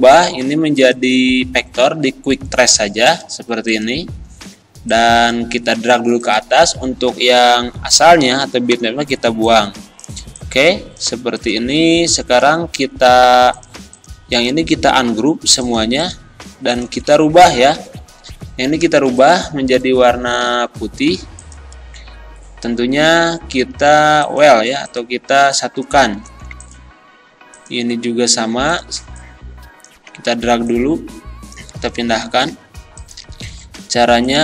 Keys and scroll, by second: 8.7 Delete, 26.3 ctrl+z.